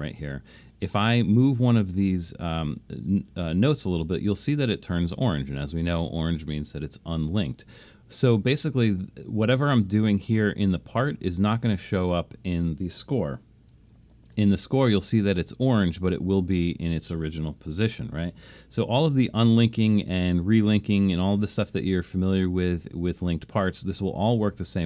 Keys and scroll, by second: 14.0 alt+super+/.